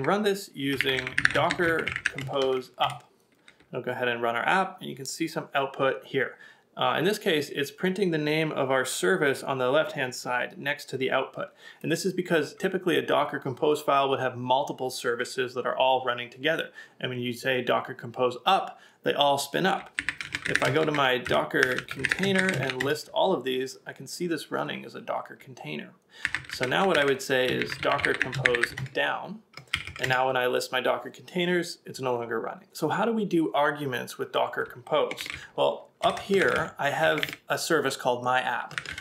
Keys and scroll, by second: 0.7 BackSpace, 20.0-20.7 typing, 26.3 typing, 30.0 Up, 32.3 Return, 35.2 shift+v, 35.5 k, 36.0 BackSpace, 36.1 BackSpace, 36.5 ctrl+a, 37.0 ctrl+a, 37.2 shift+v, 38.8 ctrl+a.